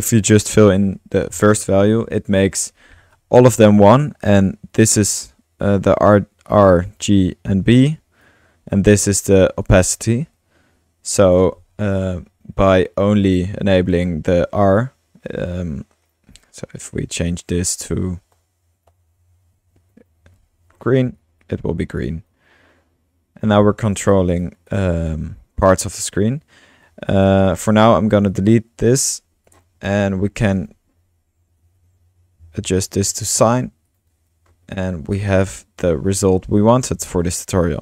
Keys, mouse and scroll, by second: 0.0-1.4 drag, 2.3 click, 3.1-4.0 drag, 4.7-5.7 drag, 6.5-7.1 drag, 7.3-18.2 drag, 13.9 typing, 18.1-18.8 typing, 18.9 Right, 19.9 typing, 21.2-23.6 drag, 23.9 click, 24.1-24.9 typing, 24.4-24.8 drag, 25.8 click, 26.3 middle click, 27.2 click, 27.2-28.0 typing, 28.3-29.5 drag, 29.2-30.0 typing, 30.5-32.4 drag, 32.1-33.3 typing, 33.9-34.5 drag, 34.5 middle click, 34.7 click, 35.9-37.8 drag.